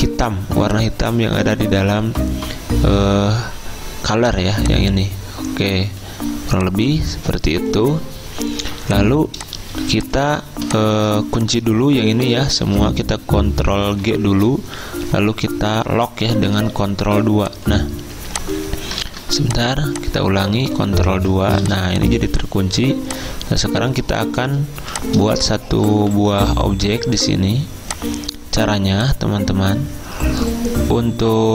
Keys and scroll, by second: 14.1 ctrl+g, 17.1 ctrl+2, 19.1 ctrl+z, 21.0 ctrl+2, 24.8-26.6 typing.